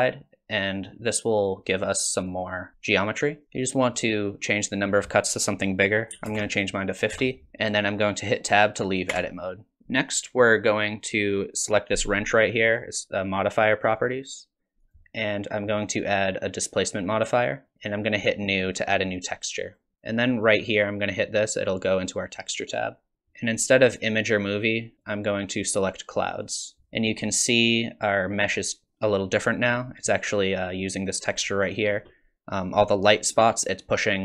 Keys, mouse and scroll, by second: 1.4 click, 2.4 click, 4.7 click, 9.1 Tab, 9.8 middle click, 13.9 click, 14.8 click, 19.7 click, 22.6 click, 23.2 click, 24.9 click.